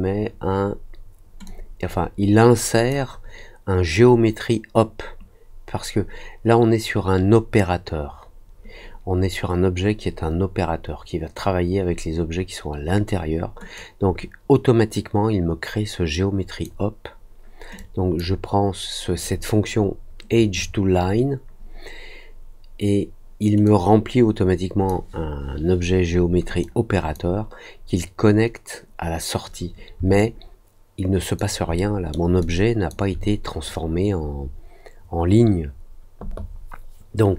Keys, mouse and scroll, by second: 1.4-2.8 drag, 13.7-16.6 drag, 17.7-18.1 drag, 23.6-24.8 drag, 26.5 click, 30.1-31.3 alt+drag, 31.7 alt+middle click, 32.3 alt+click.